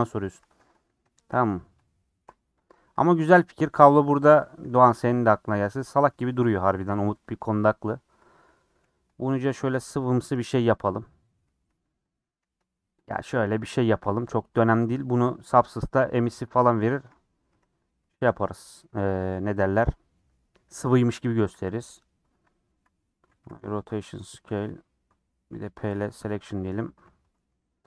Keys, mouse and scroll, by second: 0.1 click, 0.4 Tab, 0.6 3, 0.7 click, 1.2 shift+d, 2.2 p, 2.9 Tab, 3.1-4.3 drag, 4.3 Tab, 4.5 a, 4.8 e, 5.7-7.4 middle drag, 7.4 KP_Decimal, 7.7 scroll down 4, 8.2 click, 8.5 scroll down 4, 8.8 g, 9.8 middle click, 10.1 scroll up 1, 10.3-13.1 typing, 11.3 scroll up 2, 13.8 shift+middle click, 14.0 scroll down 1, 14.1 middle click, 14.7 Tab, 16.0 middle click, 16.3 Tab, 16.6 middle click, 16.9 alt+z, 17.1 middle click, 17.5 3, 17.8 click, 18.2 g, 19.3 middle click, 20.2 Tab, 20.7 middle click, 21.0 Tab, 21.5 a, 23.0 Tab, 23.3 ctrl+a, 24.2 Tab, 25.5 p, 26.2 Tab, 26.4 click, 26.8 Tab, 27.1 a, 27.7 ctrl+b.